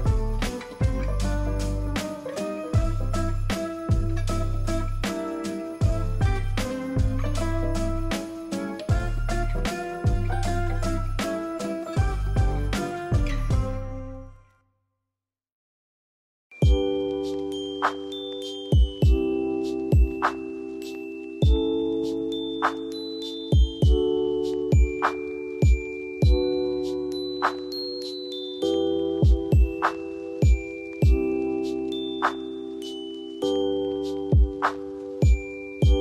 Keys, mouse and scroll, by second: 30.3 alt+click.